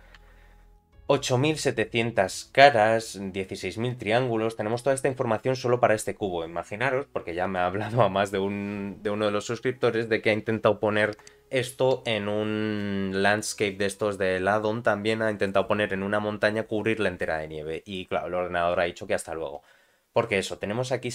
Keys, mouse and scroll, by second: 0.2 a, 1.9 middle click, 4.7 middle click, 20.4-21.1 middle drag.